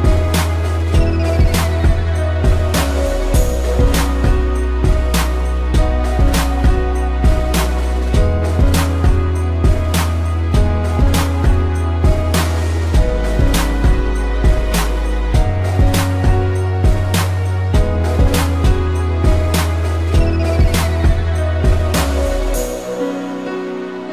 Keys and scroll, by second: 0.2 ctrl+-, 2.3 space, 7.3 a, 8.3 ctrl+s, 13.0 ctrl+0.